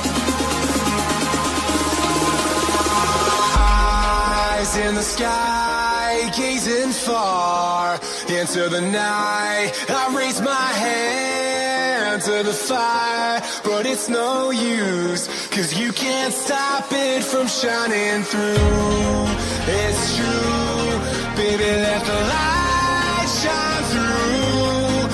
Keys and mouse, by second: 0.1 space, 2.0 click, 6.8 click, 9.5 click, 9.9 click, 12.1 ctrl+d, 12.1 click, 12.5 click, 13.3 Delete, 13.3 click, 14.3 Return, 16.7 click, 17.6 Return, 17.7-19.7 typing, 21.2 Return, 22.9 click, 23.5 click.